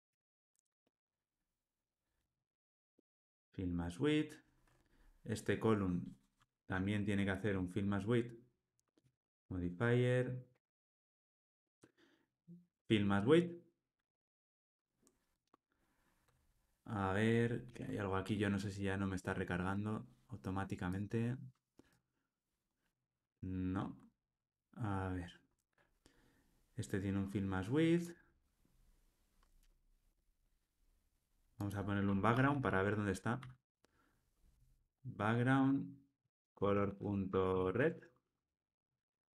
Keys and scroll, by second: 0.0 super+x, 11.5 Tab, 17.7 ctrl+r, 35.6 Return, 38.4 Tab.